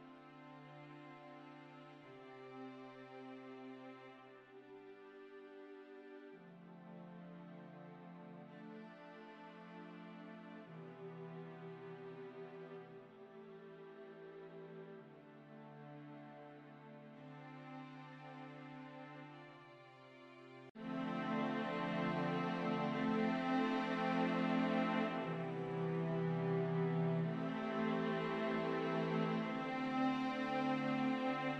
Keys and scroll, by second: 7.2-8.1 typing, 8.4 Tab, 17.2 typing, 17.4 Return, 20.7 w, 29.4 5, 29.6 Return.